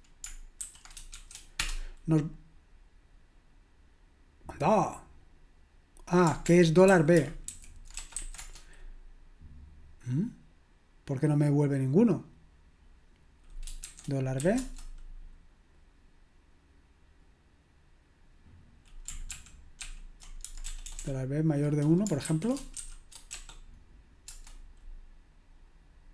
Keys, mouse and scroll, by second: 0.4-1.1 typing, 1.6 Return, 6.5 ctrl+p, 6.9 ctrl+a, 7.5 alt+f, 8.0 BackSpace, 8.2 b, 8.4 Return, 13.9-14.4 typing, 14.6 Return, 19.3 ctrl+p, 19.8 ctrl+p, 20.6 BackSpace, 20.9 BackSpace, 21.0 BackSpace, 22.2-23.4 typing, 24.3 Return.